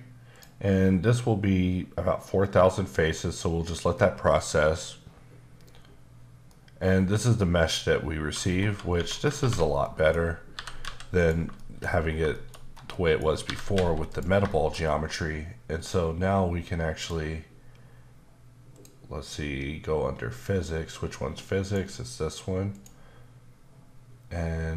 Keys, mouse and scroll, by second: 0.3 click, 6.5 middle click, 8.5 scroll up 1, 8.6 Tab, 8.9 Tab, 9.4 ctrl+1, 9.7-10.5 scroll down 3, 9.8 middle click, 10.5 typing, 11.2 click, 11.5 shift+middle click, 12.0 scroll up 1, 12.3 shift+middle click, 12.7 scroll down 1, 12.9 middle click, 13.4-13.7 typing, 14.1 click, 14.5 middle click, 17.0 click, 18.7 click, 21.6 click, 22.7 click.